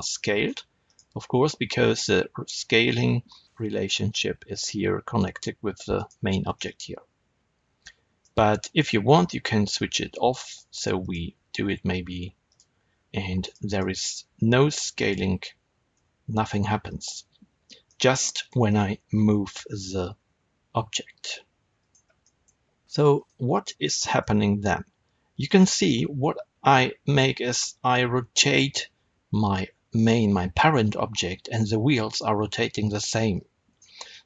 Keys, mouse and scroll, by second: 0.4 right click, 0.8 click, 5.9 click, 6.5-8.7 middle drag, 8.7 click, 10.4 click, 10.7 click, 10.9 click, 12.4 click, 13.4 click, 13.6 click, 13.9 click, 14.9 click, 15.9 s, 16.9 right click, 17.8-21.8 middle drag, 19.0 r, 21.8 right click, 22.1-23.2 middle drag, 22.8 g, 23.2 right click, 23.8-33.7 middle drag, 24.3 r, 33.7 right click, 34.0-34.2 middle drag.